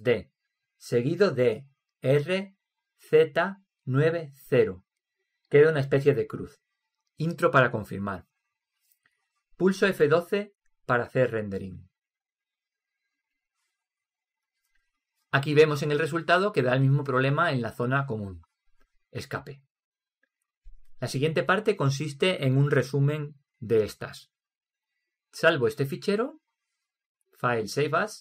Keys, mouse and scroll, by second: 1.0 shift+d, 10.5 F1, 27.2-28.2 drag.